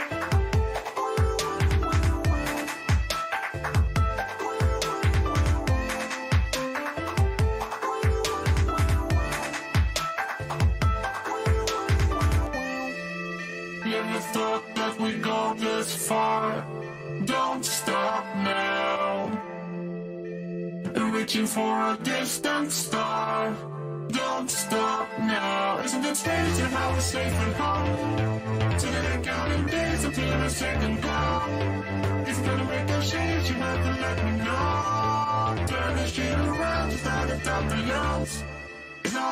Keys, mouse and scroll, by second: 1.0 ctrl+z, 2.2-4.0 middle drag, 9.3-11.8 middle drag, 12.2 a, 14.9-21.4 middle drag, 23.6-30.5 middle drag, 24.7 a, 25.0 a, 30.5-32.6 right drag, 31.9 a, 32.2 a, 32.6 a, 33.3-37.1 right drag, 37.1-39.3 middle drag.